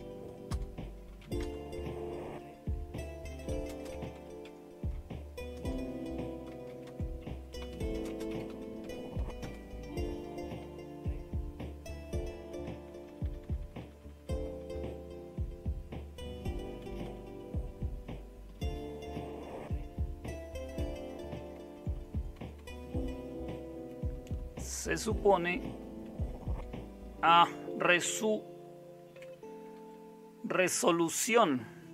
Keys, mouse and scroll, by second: 0.0-1.7 typing, 3.1-9.3 typing, 11.5-12.3 typing, 12.4 Down, 12.6 Down, 12.8-16.8 Down, 16.8-17.5 typing, 21.3 Right, 21.5 Right, 21.7 Right, 21.9 Right, 22.1 Right, 22.3 Right, 22.5 Right, 23.6 Right, 23.9 Right, 24.1 Right, 24.3 Right, 24.6 Right, 24.9 Right, 25.2 Right, 25.5 Right, 26.0 Right, 26.2 Right, 26.5 Right, 27.1 Right, 27.4 Right, 27.5 Right, 27.8 Right, 29.1 o, 29.7 Delete.